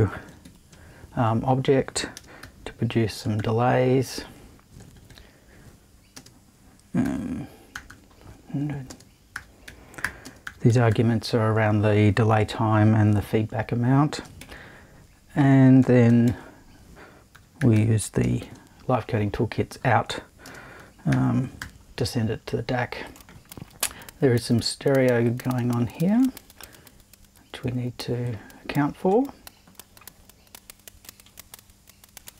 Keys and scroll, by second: 0.0-0.9 typing, 2.4 5, 3.2 0, 4.8 BackSpace, 6.1 space, 7.0 5, 7.7 0, 8.9-11.4 typing, 14.4 super+`, 15.8 BackSpace, 16.2 super+i, 17.1-18.4 typing, 20.4-22.1 typing.